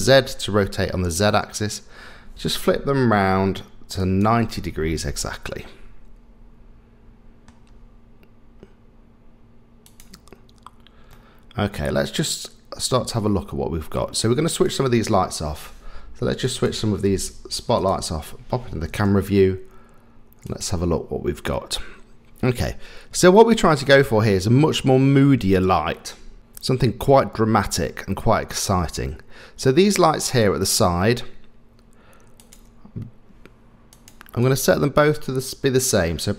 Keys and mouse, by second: 5.2-7.5 middle drag, 5.7 typing, 9.8 click, 11.1 middle click, 13.2 middle click, 16.5 click, 17.8 click, 18.9 KP_0, 30.6 click, 34.1 click, 34.5 click, 35.9-36.3 drag.